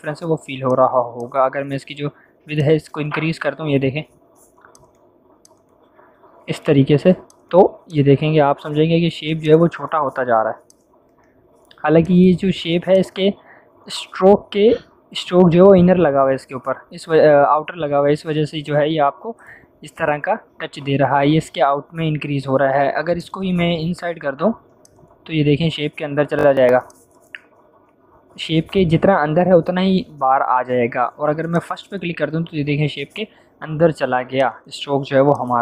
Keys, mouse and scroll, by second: 23.1 click, 31.5 click, 34.3-35.6 drag.